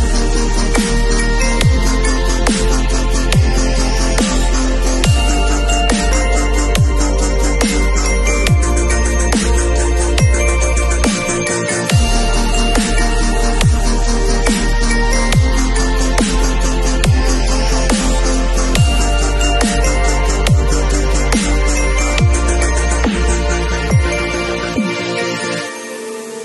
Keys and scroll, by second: 9.6 super+z, 24.0 super+i, 25.4 b.